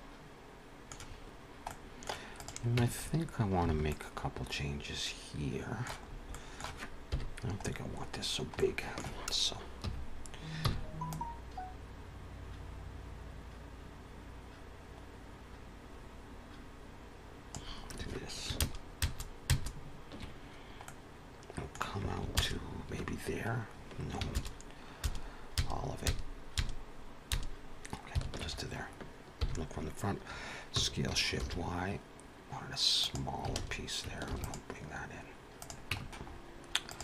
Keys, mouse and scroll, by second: 1.6 middle click, 2.2 click, 2.7 Tab, 2.9 scroll up 3, 3.6 alt+a, 3.8 middle click, 6.0 scroll up 1, 6.2 middle click, 7.0 KP_1, 7.5 scroll up 3, 8.1 scroll down 1, 8.5 shift+middle click, 9.6 3, 10.5 c, 18.5 ctrl+KP_Add, 19.0 ctrl+KP_Add, 19.3 ctrl+KP_Add, 20.7 middle click, 22.3 ctrl+KP_Add, 24.5 ctrl+KP_Add, 25.7 ctrl+KP_Add, 26.1 ctrl+KP_Add, 26.4 ctrl+KP_Add, 27.3 ctrl+KP_Add, 28.2 ctrl+KP_Subtract, 29.3 KP_1, 30.8 s, 33.6 alt+a, 34.2 ctrl+r, 35.8 Tab, 35.9 scroll down 4, 36.1 middle click, 36.2-36.5 scroll up 3, 36.7 click.